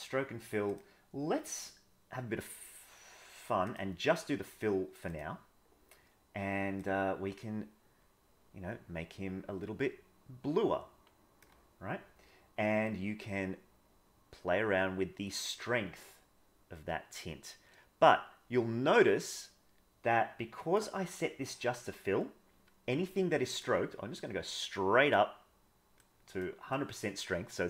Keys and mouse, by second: 0.6-4.0 drag, 5.1 click, 12.8-20.8 drag, 23.7-25.1 drag, 25.9 click, 26.8 click.